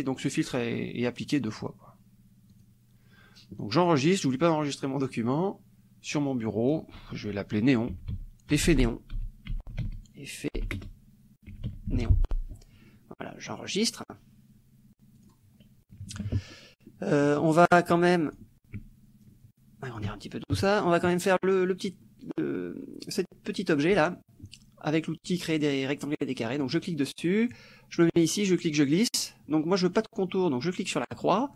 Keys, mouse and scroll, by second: 2.5 click, 4.3 click, 7.7-9.2 typing, 10.6-12.5 typing, 14.0 click, 15.2 click, 16.0 KP_Subtract, 17.3 click, 18.3 click, 19.4 ctrl+shift+click, 20.5 ctrl+shift+KP_Subtract, 22.1 click, 26.8 click, 28.1-29.4 drag, 31.3 click.